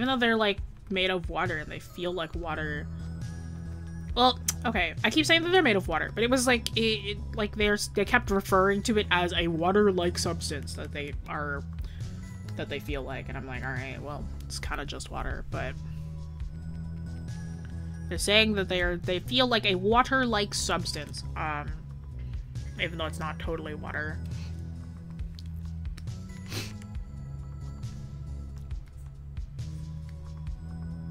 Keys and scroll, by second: 10.6 scroll down 1.